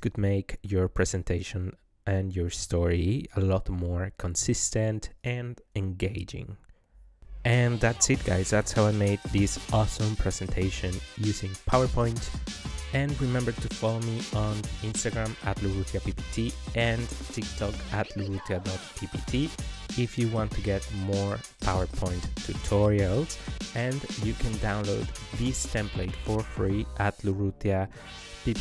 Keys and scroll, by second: 2.4 KP_2, 2.7 KP_Decimal, 2.9 KP_2, 3.2 KP_5, 4.2 Return.